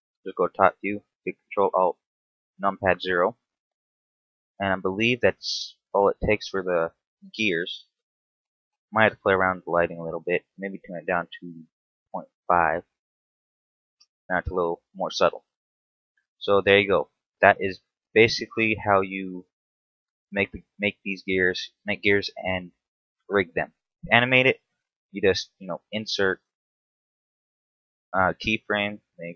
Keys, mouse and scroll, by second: 2.1 ctrl+alt+KP_0, 16.0 Escape, 16.7-17.6 scroll up 2, 19.3 right click, 20.4 scroll down 1, 20.7 shift+middle click, 26.0 i.